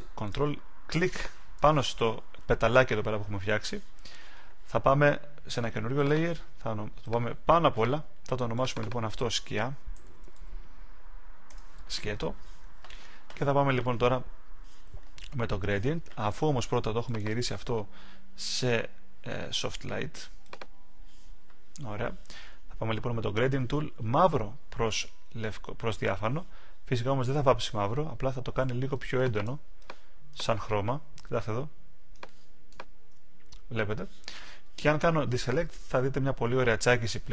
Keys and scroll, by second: 11.4 Return.